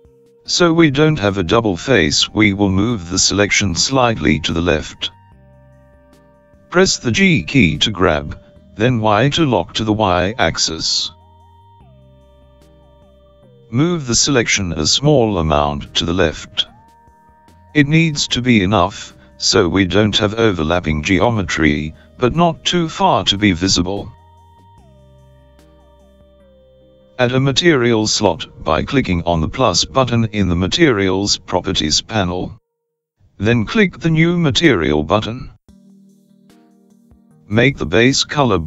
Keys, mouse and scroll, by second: 32.3 click, 34.4 click, 36.3 click.